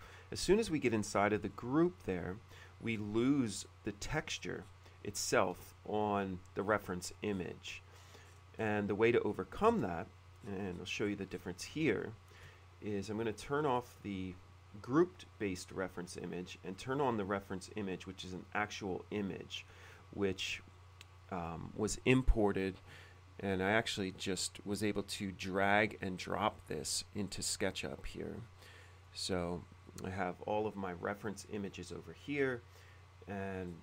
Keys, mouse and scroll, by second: 0.2 middle click, 0.6 scroll up 2, 1.6 shift+middle click, 3.0-3.6 scroll up 1, 4.1 middle click, 4.5-5.1 scroll up 2, 5.8 shift+middle click, 7.4-8.8 scroll up 3, 8.8-9.1 scroll up 1, 9.8 shift+c, 10.5 middle click, 11.2 middle click, 11.5-12.3 shift+scroll up 2, 11.8 middle click, 12.3 shift+middle click, 14.0 click, 16.9 click, 17.6 click, 21.6 middle click, 24.3 click, 24.9 click, 25.8 click, 26.8 click, 29.1 click, 30.1-33.0 drag, 33.7 middle click.